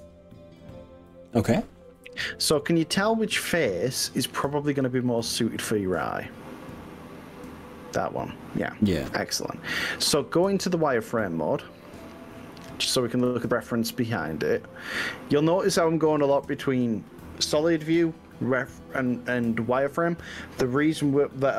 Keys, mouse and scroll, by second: 4.5 click, 6.1 click, 6.9 click, 13.3 z.